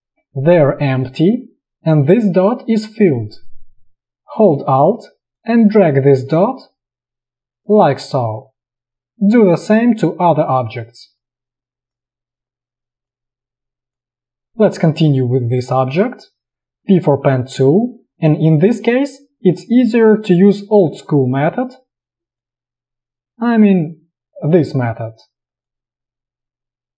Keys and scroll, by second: 14.3 alt+space, 16.9 p.